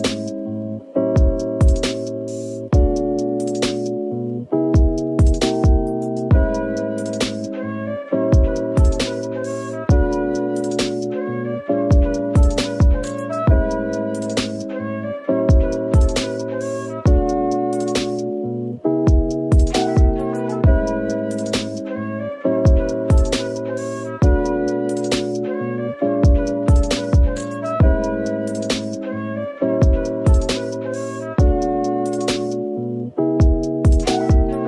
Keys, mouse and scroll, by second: 1.8 typing, 3.0 middle click, 3.3-7.4 typing, 10.9 middle click, 12.8 Tab, 14.2 typing, 15.5 typing, 19.1 right click, 20.2-22.5 typing, 20.6 right click, 23.6 typing, 25.9 ctrl+r, 26.4-27.2 scroll up 1, 27.7 double click, 28.4 o, 30.2 o, 30.2 alt+click, 31.0 s, 33.5 s, 33.6 alt+click, 34.2 s.